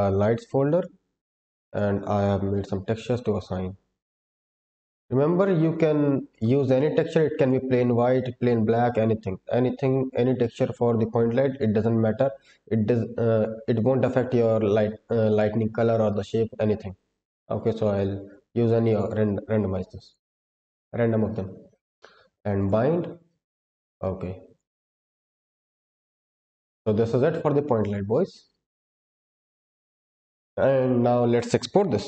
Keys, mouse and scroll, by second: 21.3-21.7 scroll down 2, 21.6-22.5 scroll up 2, 22.5 drag, 23.0-23.7 scroll down 2, 23.7 click, 25.7-26.4 scroll up 2, 26.4-26.8 scroll down 1, 27.2-28.1 scroll down 4, 28.1-28.8 scroll up 4, 29.1-30.6 scroll up 1, 30.6-31.1 scroll up 1.